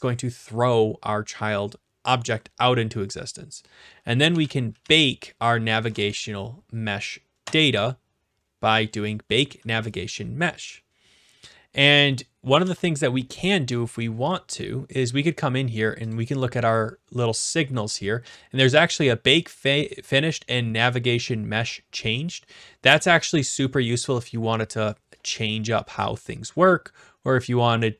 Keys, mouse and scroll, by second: 4.0-5.3 typing, 7.4 Return, 12.0 scroll, 12.6 ctrl+s, 16.0 click, 16.1 click, 23.9 click.